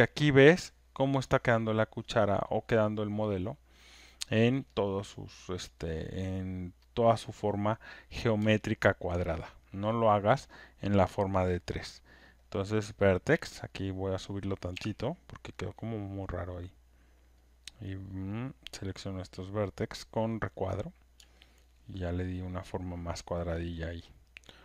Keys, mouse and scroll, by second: 0.8 alt+middle click, 3.5 alt+right click, 3.6 alt+click, 4.3 alt+right click, 4.6 alt+middle click, 5.6 alt+click, 8.7 alt+right click, 9.0 alt+middle click, 9.5 alt+click, 9.9 alt+right click, 10.4 alt+click, 10.8 alt+middle click, 12.7 right click, 13.8 click, 14.7 w, 16.3 click, 18.2 click, 19.8 click, 23.4 alt+click, 23.9 alt+right click.